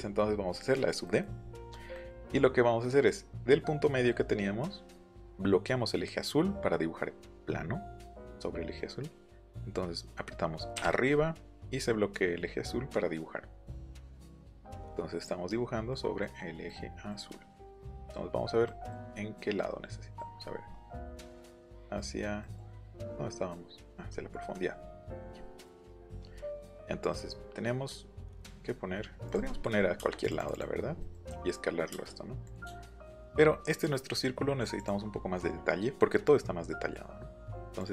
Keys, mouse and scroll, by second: 10.8 Up, 14.3 middle click, 15.9 click, 16.7 click, 19.0-19.4 scroll up 1, 20.4-20.7 scroll up 1, 22.7 middle click, 24.1 middle click, 29.3 click, 29.8-30.2 scroll down 1, 30.2 click, 30.4 click, 30.5 click, 31.3 scroll up 1, 31.3 s, 32.5 click, 32.7 shift+middle click, 34.8 click, 37.8 click.